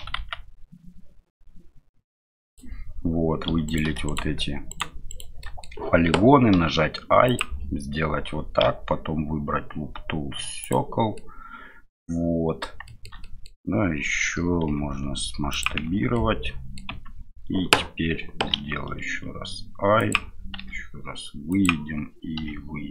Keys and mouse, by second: 3.5 3, 4.0 shift+right click, 4.7 shift+right click, 5.4 middle click, 6.5 i, 11.3-12.6 middle drag, 12.9 shift+middle click, 13.3 middle click, 15.9 Tab, 16.1 middle click, 16.9 Tab.